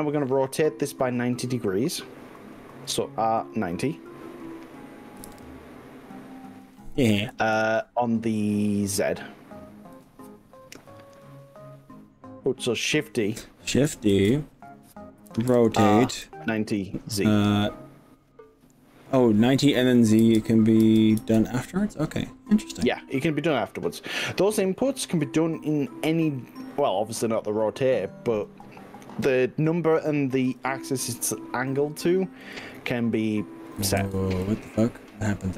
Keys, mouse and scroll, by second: 2.9 r, 5.2 9, 5.4 0, 7.4 click, 8.0 ctrl+z, 10.0 z, 14.2 shift+d, 15.6 r, 20.2 9, 21.0 0, 21.2 z, 30.6 g, 32.6 ctrl+z, 33.2 click, 34.0 ctrl+z, 34.4 middle click, 35.0 middle click, 35.4-35.5 middle drag.